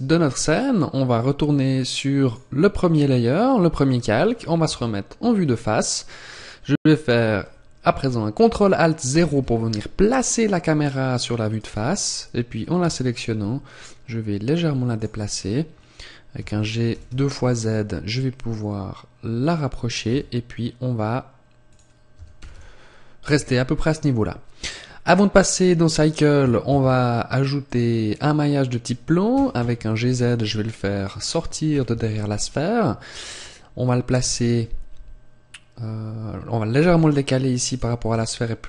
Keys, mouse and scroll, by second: 1.2-2.2 scroll down 2, 2.2 click, 2.8-3.7 scroll down 1, 4.2 scroll down 1, 4.6 KP_1, 5.3-6.1 scroll down 1, 6.3-6.7 scroll down 5, 8.9 ctrl+alt+KP_0, 11.4 right click, 12.7 g, 14.9 click, 15.1-15.5 scroll up 3, 15.5-16.2 scroll down 1, 16.2 scroll down 1, 16.2 g, 19.3 click, 19.9 g, 21.6 click, 22.0 g, 23.1 click, 26.5 shift+a, 30.9 click, 31.5 KP_1, 32.5-32.9 scroll up 1, 34.1 g, 37.6 click, 37.9 r.